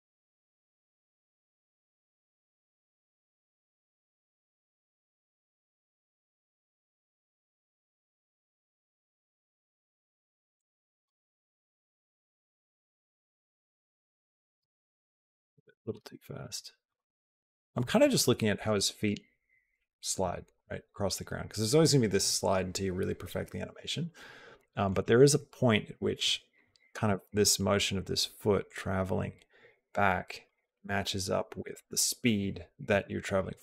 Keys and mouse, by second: 4.7 g, 10.8 click, 14.5 space, 15.0 g, 15.8 space, 28.5-30.3 drag, 28.5 space, 33.4-33.6 drag.